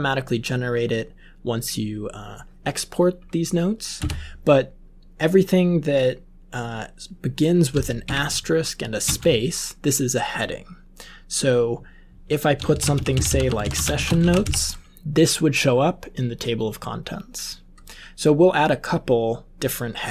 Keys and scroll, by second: 3.9 Return, 8.0 *, 9.0 space, 12.4-14.8 typing.